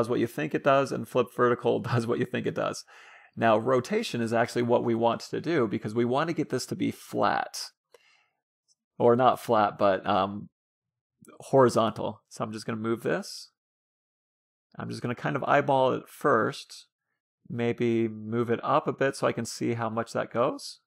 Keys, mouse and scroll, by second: 4.7-6.2 drag, 7.1 ctrl+z, 8.6-10.1 drag, 18.2-19.9 drag.